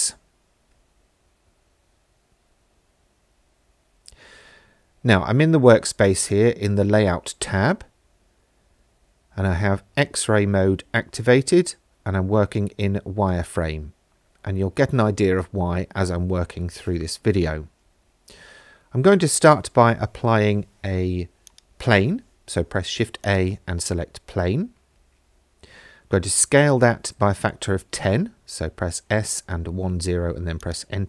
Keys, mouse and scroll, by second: 21.5 click, 21.9 shift+a, 26.9 s, 27.3 KP_1, 27.5 KP_0, 28.1 KP_Enter, 29.6 ctrl+a.